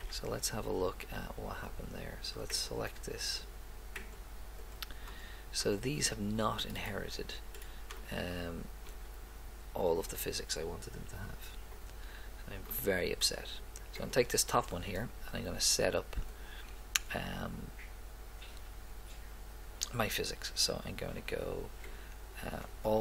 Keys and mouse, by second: 0.7 middle click, 2.6-5.5 right drag, 5.6 click, 14.0-15.2 right drag, 15.2 middle click.